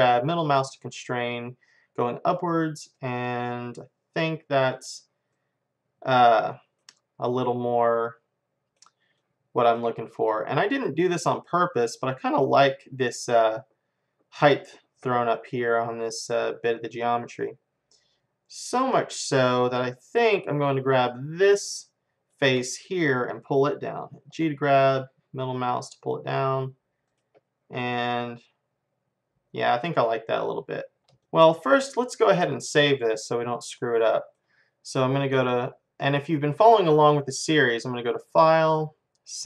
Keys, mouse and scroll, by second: 3.4-6.4 middle drag, 6.9-17.3 middle drag, 21.5 click, 22.3-24.3 middle drag, 24.3 g, 27.5-29.7 middle drag, 31.0-35.3 middle drag, 37.6-39.4 drag, 39.4 click.